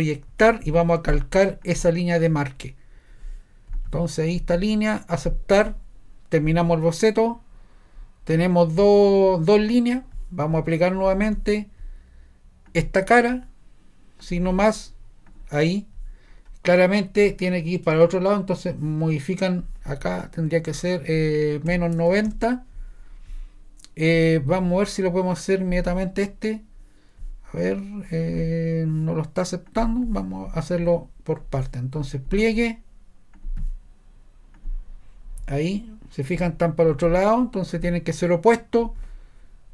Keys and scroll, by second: 0.3 p, 21.4-22.8 typing.